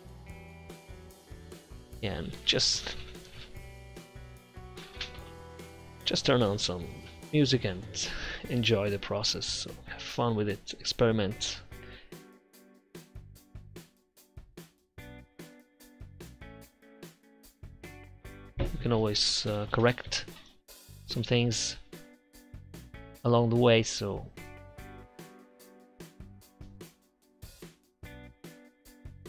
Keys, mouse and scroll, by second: 0.4 f, 0.9-2.0 drag, 3.0 f, 4.3 ctrl+z, 5.3 click, 7.3-8.8 drag, 9.2-9.5 typing, 10.7 shift+4, 10.8 click, 11.5 click, 14.2 shift+6, 15.0 ctrl+alt+shift+6, 15.4 Tab, 15.6 6, 16.8-19.4 drag, 17.7 f, 18.2 ctrl+z, 19.5 click, 19.8 ctrl+z, 22.6 ctrl+z, 23.8 click, 24.5 click, 25.5-26.5 drag, 26.5 4, 26.8 ctrl+z, 27.1 ctrl+z, 27.4 4, 28.0 click, 28.4 ctrl+z, 28.7 click.